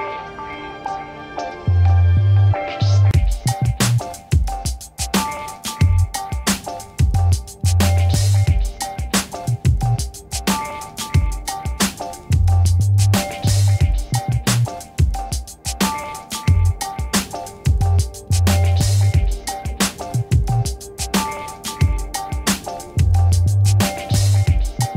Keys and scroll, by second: 21.7 t.